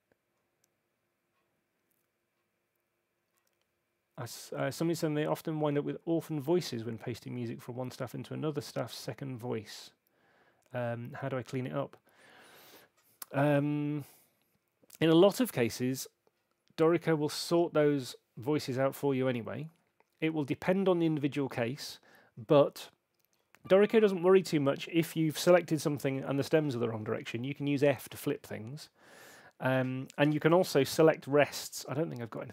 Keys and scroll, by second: 25.9 f.